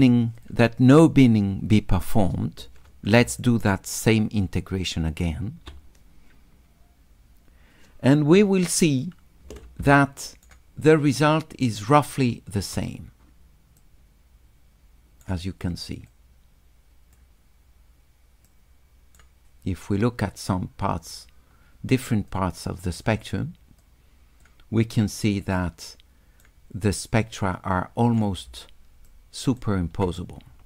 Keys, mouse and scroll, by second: 0.4 click, 3.3 s, 3.4 click, 4.1 right click, 4.4 click, 10.0 shift+click, 11.2 shift+click, 13.8-15.3 drag, 16.1-17.2 drag, 18.5 click, 20.1-21.1 drag, 22.3 click, 23.8 click, 25.6 middle click, 27.2 click, 29.1 shift+right click.